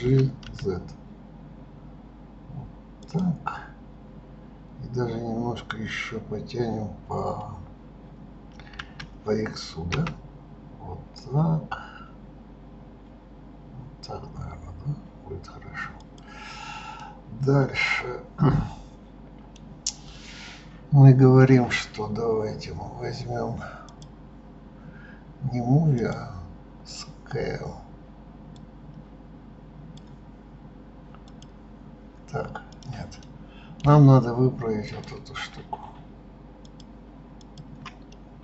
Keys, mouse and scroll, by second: 16.7-19.7 middle drag, 23.6 click, 25.7-26.7 drag, 28.3 click, 31.0 click, 32.5 click, 33.0-34.6 middle drag, 34.6 click, 36.4 shift+click, 37.1 shift+click, 37.9-38.4 middle drag.